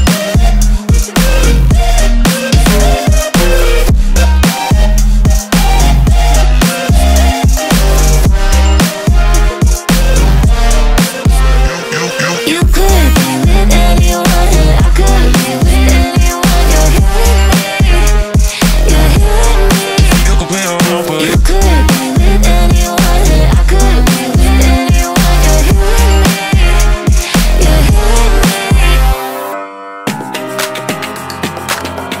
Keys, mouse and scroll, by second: 0.0 click, 0.7 s, 2.4 Tab, 3.7 click, 5.0 drag, 5.4 click, 5.9 ctrl+a, 6.9 BackSpace, 10.2 drag, 12.0 click, 12.3 click, 13.5-17.3 middle drag, 17.3 click, 18.8-19.8 drag, 20.4-22.7 drag, 23.2-25.9 middle drag, 25.9-28.7 drag, 28.7-32.2 middle drag.